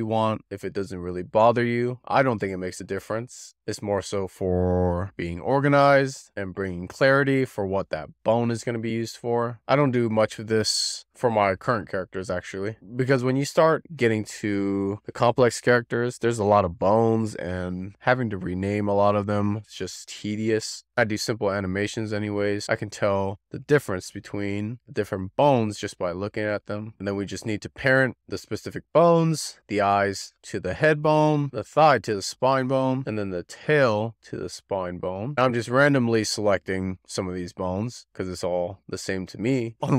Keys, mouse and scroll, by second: 0.0-0.3 scroll up 2, 0.7 drag, 1.1 F2, 3.2 click, 3.9 click, 4.3 F2, 6.1 click, 6.4 F2, 7.7 F2, 8.5 BackSpace, 10.7 click, 10.9 F2, 12.8 click, 13.6 click, 13.9 F2, 14.8 click, 15.0 F2, 15.8 click, 16.1 F2, 16.9 click, 17.1 F2, 18.4 click, 18.7 F2, 19.8 BackSpace, 20.5 click, 20.8 F2, 21.8 click, 22.0 F2, 22.9 BackSpace, 23.5 click, 23.6 F2, 24.4 click, 24.5 click, 24.8 F2, 25.6 click, 25.8 F2, 26.8 click, 27.2 click, 27.7 shift+click, 28.5 ctrl+p, 29.1 click, 30.0 ctrl+click, 30.3 shift+click, 30.7 ctrl+p, 31.3 click, 31.5 ctrl+p, 31.8 click, 31.9 shift+click, 32.0 ctrl+p, 32.2 click, 32.3 ctrl+click, 32.3 shift+click, 32.5 ctrl+p, 32.7 click, 32.9 shift+click, 33.5 ctrl+p, 35.2 shift+middle click, 35.4 click, 35.6 click, 35.7 shift+click, 35.9 click, 36.0 ctrl+p, 36.3-36.9 scroll down 5, 37.0 shift+middle click, 37.6-38.3 scroll up 1, 38.3 scroll up 1, 39.2-39.7 scroll down 4.